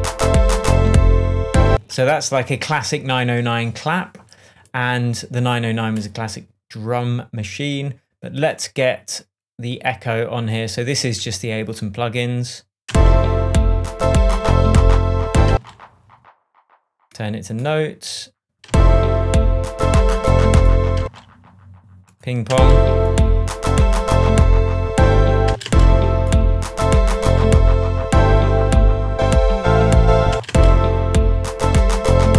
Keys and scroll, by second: 0.0 space, 0.8 shift+Tab, 1.6 shift+space, 12.8 space, 15.4 space, 18.6 space, 21.0 space, 22.5 space, 25.4 space, 30.3 space.